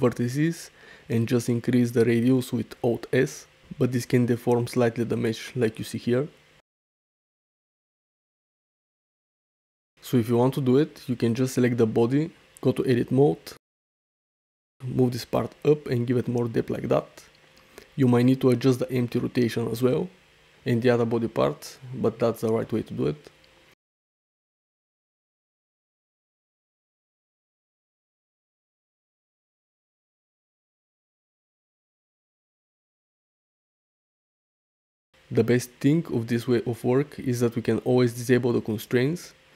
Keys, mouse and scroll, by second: 0.1 Tab, 0.3 a, 0.9 alt+s, 3.6 shift+middle click, 3.9 middle click, 4.5 shift+middle click, 7.0 click, 8.1 middle click, 9.1 middle click, 9.6-10.2 ctrl+z, 10.4 Tab, 12.4 Tab, 12.7 a, 13.3 `, 14.4 `, 15.2 g, 15.5 z, 16.2 click, 16.7 Tab, 17.6 click, 18.0 r, 18.5 x, 20.5 Tab, 20.7 click, 22.2 Tab, 22.5 a, 22.9 g, 23.2 z, 24.0 Tab, 24.7 Tab, 24.9-25.9 typing, 25.7 click, 26.4 Tab, 26.7 ctrl+t, 29.1 click, 30.0 g, 30.6 g, 34.0-34.9 middle drag, 36.3 click, 37.6 click, 38.6 click.